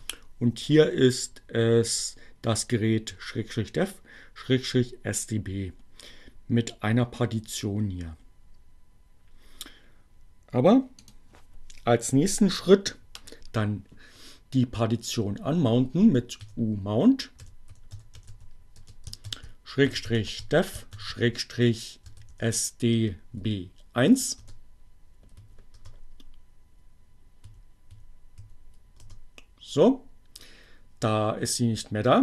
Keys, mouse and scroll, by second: 10.2 click, 14.6 u, 16.6-23.1 typing, 24.6 Return, 25.0 Up, 25.6 Return, 27.2 Up, 27.9 Return.